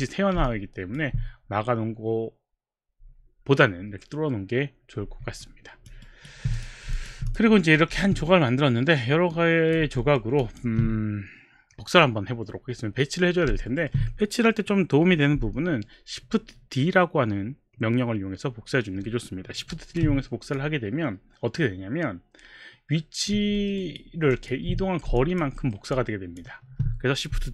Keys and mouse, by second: 0.5 alt+click, 0.6 alt+click, 5.4 alt+click, 6.4 alt+right click, 6.5 click, 7.0 alt+click, 7.3 click, 8.0 w, 9.4 click, 10.3 alt+middle click, 10.5 alt+click, 13.6 alt+middle click, 19.8 shift+d, 20.5 click, 23.6 alt+middle click, 23.8 alt+right click, 24.5 alt+click, 25.2 alt+click, 26.0 alt+click, 26.8 alt+click.